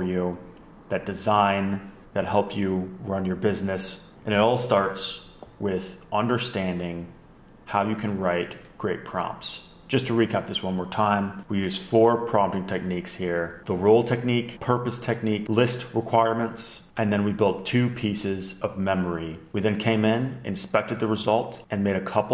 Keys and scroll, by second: 8.7 super+Up.